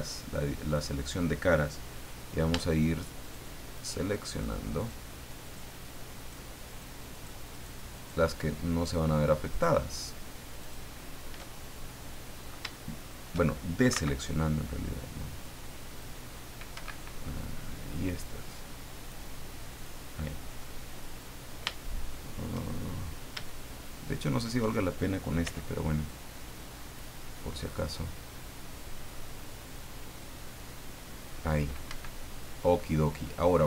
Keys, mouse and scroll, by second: 0.6 click, 2.7 shift+right click, 3.2 shift+right click, 3.7 shift+right click, 4.3 shift+right click, 4.8 shift+right click, 5.4 shift+right click, 6.2 shift+right click, 6.7 shift+right click, 7.1 shift+right click, 7.5 shift+right click, 7.9 shift+right click, 9.5 shift+right click, 10.6 shift+right click, 11.8-12.4 shift+scroll up 1, 12.7 shift+middle click, 13.9 c, 14.9-16.2 drag, 16.7 Escape, 17.8 click, 19.0 click, 19.7 click, 21.0 middle click, 21.7 shift+middle click, 23.5-24.5 shift+middle drag, 25.4 c, 26.1 click, 27.7-31.5 middle drag, 31.9 Escape, 32.3-32.6 scroll down 1, 32.8 click.